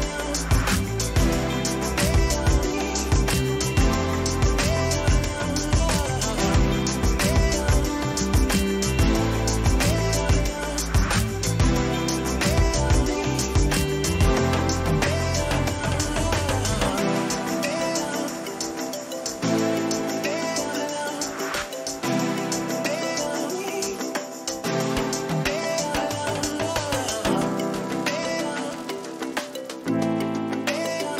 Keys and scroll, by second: 8.8 a, 9.3 g, 9.8 a, 12.5-15.2 typing, 13.7 ctrl+a, 13.9 Caps_Lock, 15.5 ctrl+a, 17.2 ctrl+a, 17.9 1, 19.6 ctrl+a, 20.1 1, 20.5 9, 21.6 0, 22.2 Return, 24.7 ctrl+t, 27.6 ctrl+-.